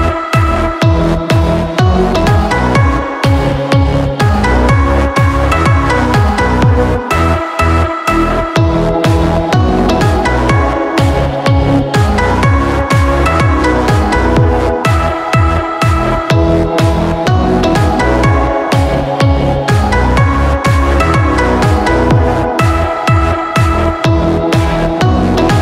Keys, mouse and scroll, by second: 10.7 1, 11.1 0, 11.7 5, 14.9 click, 16.9 0, 18.5 8, 19.5 5, 21.1 click.